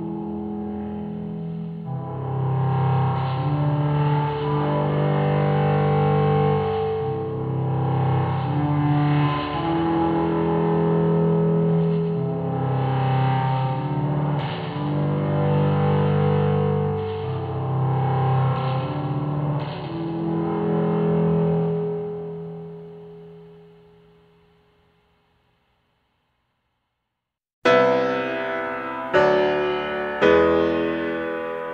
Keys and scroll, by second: 0.0-1.5 typing.